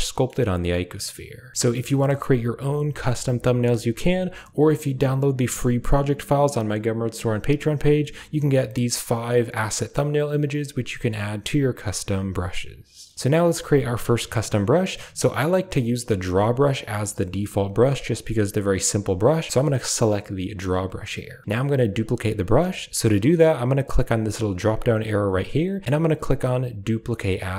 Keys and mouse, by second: 0.0 click, 24.8-25.7 drag, 25.8-27.5 drag.